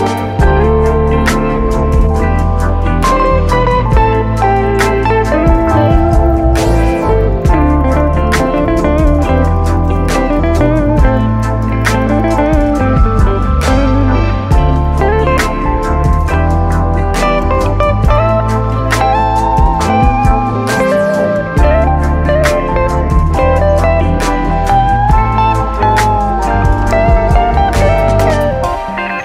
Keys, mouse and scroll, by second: 0.4 click, 1.4-1.7 scroll up 2, 1.7 middle click, 2.3 s, 3.2 click, 4.9 middle drag, 5.1 click, 5.2 scroll down 1, 5.4-6.8 middle drag, 7.8 click, 8.5 shift+click, 9.3 shift+click, 9.9 shift+click, 11.2 shift+click, 12.8-15.9 middle drag, 16.1 shift+click, 17.5 ctrl+p, 19.3 click, 21.2-22.9 drag, 24.2-25.4 drag, 27.0 shift+].